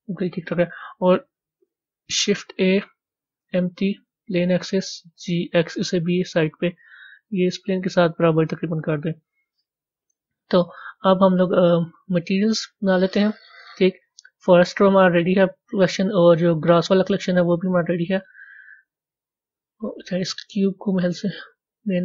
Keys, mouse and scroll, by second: 16.6 scroll down 1, 20.8 click.